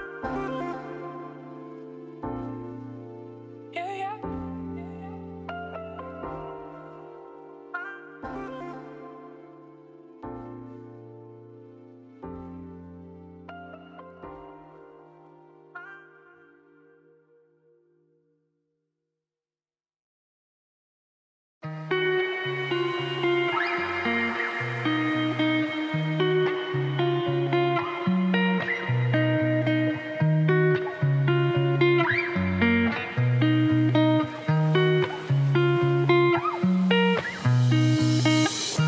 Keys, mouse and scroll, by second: 1.5 middle click, 1.8 e, 2.9 middle click, 3.6 3, 3.7 click, 3.8 g, 5.7 middle click, 6.0 2, 6.0 click, 7.2 middle click, 7.5 shift+d, 8.1 p, 8.4 Tab, 8.7 click, 9.0 Tab, 9.2 a, 9.5 KP_3, 10.0 z, 10.3-10.7 scroll up 2, 10.7 1, 11.1-11.4 scroll down 1, 13.7-17.6 ctrl+right drag, 15.2 ctrl+Right, 18.6 ctrl+Right, 18.6 right click, 18.9 ctrl+z, 19.3 ctrl+Right, 19.3-21.2 right drag, 21.5 shift+click, 21.7 f, 21.9 middle click, 22.2 2, 22.4 alt+click, 22.5 g, 23.2 alt+click, 23.5 f, 23.7 middle click, 23.8 Tab, 24.0 z, 24.2 middle click, 24.5 scroll down 1, 24.7 middle click, 25.4 scroll down 1, 25.4 scroll up 2, 25.6 click, 25.7 middle click, 25.9 Tab, 26.0 middle click, 26.1 scroll up 1, 27.4 Tab, 27.5 click, 27.6 middle click, 27.7 Tab, 27.9 a, 29.4 middle click, 30.1 Tab, 30.4 scroll down 4, 30.6-31.8 middle drag, 32.7 ctrl+s, 33.8 middle click, 34.1 click, 35.0 KP_Divide, 35.3 middle click, 35.6-36.8 scroll down 1, 38.1 middle click, 38.5 shift+a.